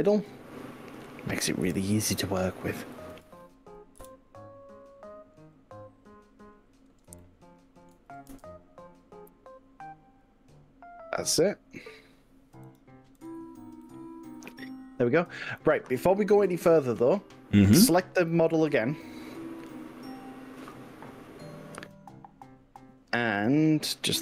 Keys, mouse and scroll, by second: 1.8 KP_1, 2.6 click, 3.0 ctrl+z, 4.0 KP_1, 5.0 scroll up 2, 5.6 scroll down 2, 6.0 scroll up 1, 7.2 shift+middle click, 8.4 s, 13.2 click, 13.8-18.0 middle drag, 18.0-19.4 drag, 20.6 click.